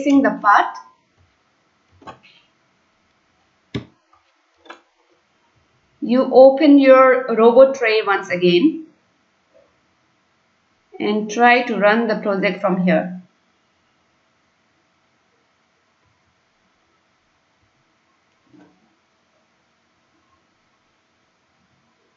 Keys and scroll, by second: 2.0 ctrl+s, 3.8 Delete, 3.9 ctrl+s.